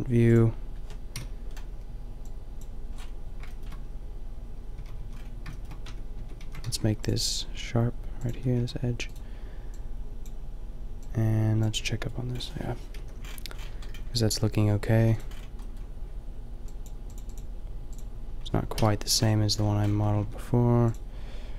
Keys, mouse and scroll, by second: 1.1 KP_5, 4.8 a, 5.0 a, 5.9 Tab, 6.1 Tab, 6.4 a, 6.6 ctrl+r, 8.3 Tab, 8.6 a, 13.0 middle click, 13.0 KP_5, 13.6-14.2 middle drag, 15.0 a, 15.3-17.1 middle drag, 18.7 KP_5, 19.9 Tab, 20.2 Tab.